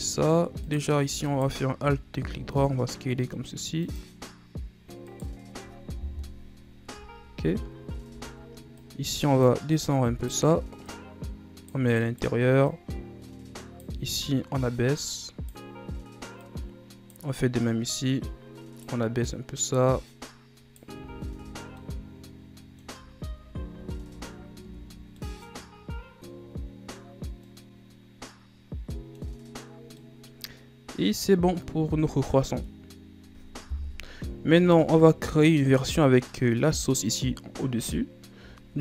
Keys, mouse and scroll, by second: 0.7 right click, 1.3 alt+right click, 2.4 s, 5.2 right click, 6.2 KP_1, 7.0 Tab, 8.2 Tab, 8.9 right click, 9.8 right click, 11.0 right click, 12.1 right click, 12.8 right click, 14.3-16.7 right drag, 17.7-21.1 right drag, 21.1 Tab, 21.5 a, 21.7 scroll down 1, 21.9-23.3 middle drag, 23.3-23.7 ctrl+z, 24.0 ctrl+z, 24.7 Tab, 25.3-28.5 middle drag, 30.1-33.1 middle drag, 33.3 middle click, 33.8 KP_1, 36.5-38.8 middle drag.